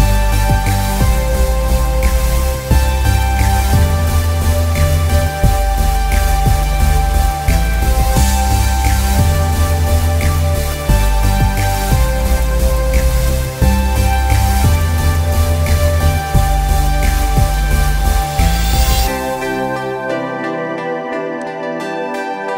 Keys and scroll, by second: 20.8 z.